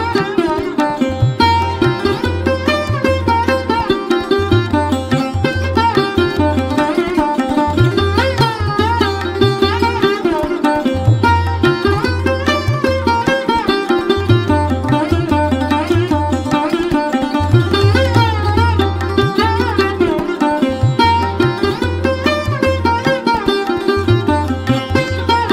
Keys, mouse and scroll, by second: 4.8-7.4 drag, 7.5-11.1 middle drag, 11.1 click, 12.1-15.7 drag, 16.4 F1, 17.6 click, 24.2 click.